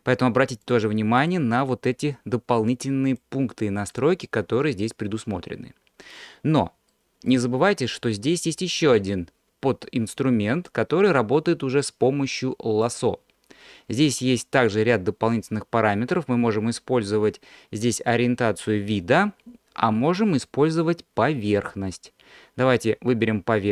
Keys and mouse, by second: 0.7-3.5 drag, 6.9 middle click, 10.2-12.9 drag, 15.4-21.7 drag.